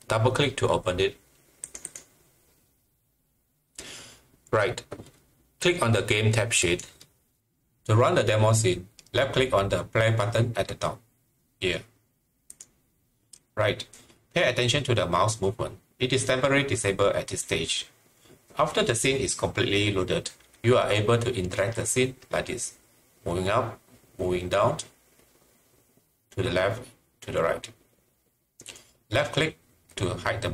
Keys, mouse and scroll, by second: 1.6 click, 1.8 double click, 6.6 click, 12.5 click.